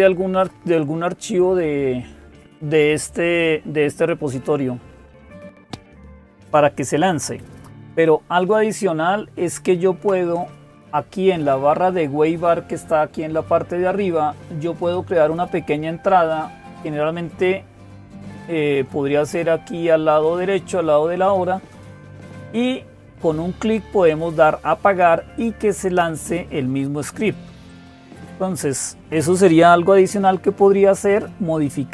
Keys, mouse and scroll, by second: 5.2 click.